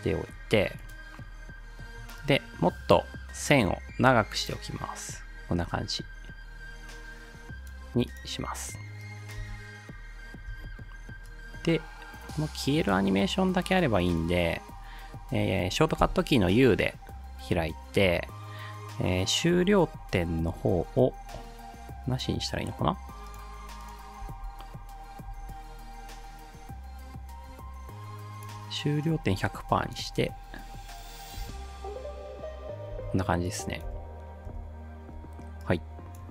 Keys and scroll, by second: 9.4 space, 10.5 space, 16.0 u, 24.2 space, 25.3 space, 31.4 space, 33.0 space, 34.5 space.